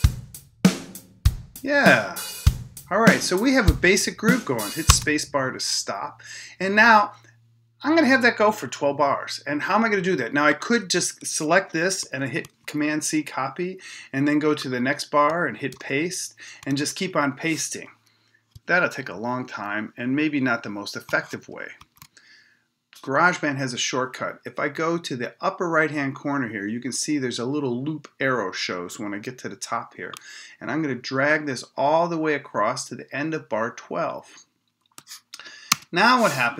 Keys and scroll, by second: 4.9 space.